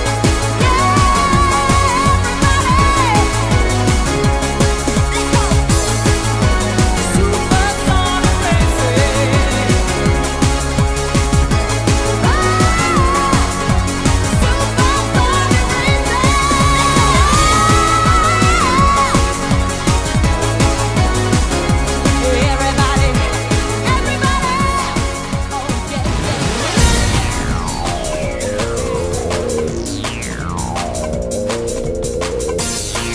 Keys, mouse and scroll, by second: 1.1 ctrl+right click, 2.7 right click, 3.4 scroll up 1, 3.9 middle click, 3.9 scroll up 2, 5.2 shift+right click, 6.1 right click, 9.5-10.3 scroll down 3, 10.5 middle click, 11.4 right click, 13.1 ctrl+right click, 13.9 right click, 14.6-15.4 scroll up 3, 15.4 right click, 16.0 middle click, 18.3 click, 22.6 scroll up 2, 22.8-23.3 scroll down 4, 23.3 middle click, 25.1 right click, 26.9-27.5 scroll up 2, 27.5 right click, 28.1 middle click, 30.5 click.